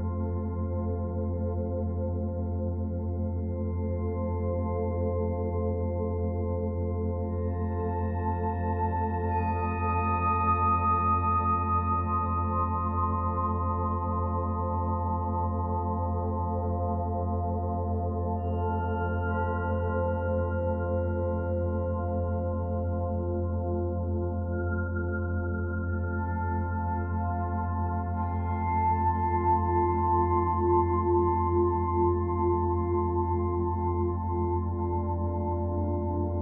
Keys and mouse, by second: 0.2-2.0 drag, 1.8 typing, 2.1 Return, 4.0 ctrl+s, 4.8 click, 6.2-8.1 alt+shift+middle drag, 6.7 alt+shift+click, 7.4 ctrl+alt+shift+click, 8.1-10.3 ctrl+alt+drag, 8.3 ctrl+alt+middle click, 10.6 click, 11.7 click, 13.8 ctrl+s, 15.5-17.5 drag, 17.8 g, 18.0 y, 18.6 click, 19.9-21.0 drag, 21.3 click, 22.0-23.8 drag, 26.8-27.8 alt+drag, 28.7 Tab, 29.3 click, 30.6 shift+s, 31.2 shift+click, 32.1 shift+s, 33.3 click, 34.9 click.